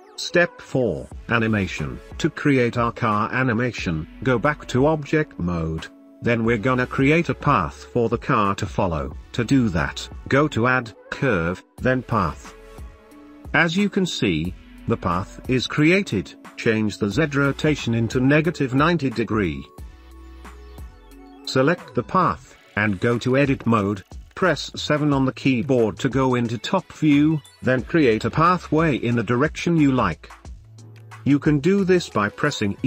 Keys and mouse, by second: 0.0-3.4 middle drag, 4.2-5.2 shift+middle drag, 5.7-7.3 shift+middle drag, 9.6-12.9 drag, 14.2-18.0 drag, 18.3-20.4 drag, 22.1 Tab, 23.6-25.8 middle drag, 25.9 KP_7, 27.2 g, 30.1 shift+middle click, 30.4 right click, 31.2 g, 31.8 click, 32.1 click, 32.4 g.